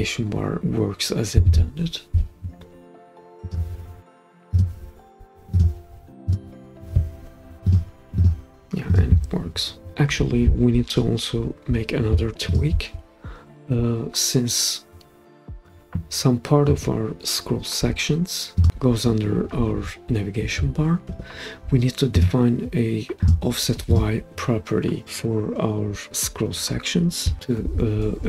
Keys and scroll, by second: 1.4 super+p, 21.1 Escape.